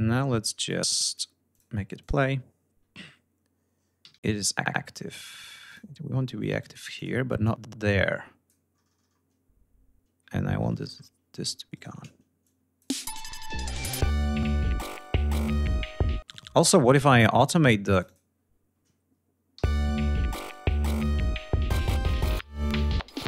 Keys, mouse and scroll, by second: 0.2 click, 1.0 click, 1.4 click, 3.4 d, 5.2 click, 6.2 click, 6.5 click, 7.0 click, 9.7 ctrl+scroll down 2, 11.2 shift+right click, 11.9 shift+click, 12.4 space, 12.5-12.9 ctrl+scroll up 2, 14.1 ctrl+scroll down 2, 15.5 space, 16.0 scroll up 2, 17.6 click, 19.2 l, 19.9 click, 22.3-23.2 drag.